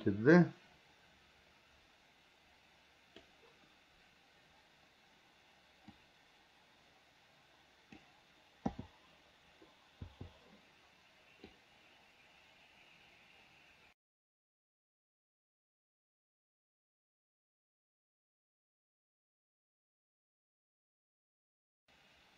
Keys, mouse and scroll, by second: 6.1 click, 6.4-8.3 drag, 8.8 o, 10.3 i, 11.7-15.9 drag, 16.6 click, 18.0 Delete, 19.5 click, 22.1-22.3 drag.